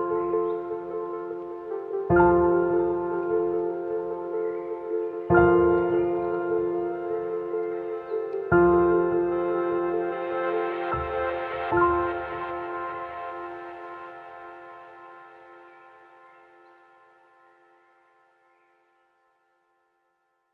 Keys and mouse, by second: 5.2 middle drag, 5.9-10.4 middle drag, 11.4 middle click, 14.9-15.5 middle drag, 16.8 ctrl+a, 19.0 click, 19.9 click.